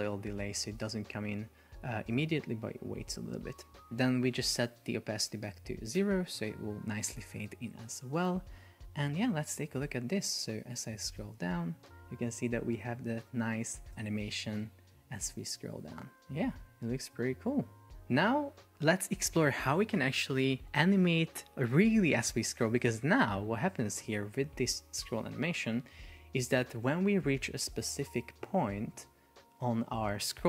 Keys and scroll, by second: 0.0 Return, 6.0 Return, 8.5 super+p, 23.9 super+p.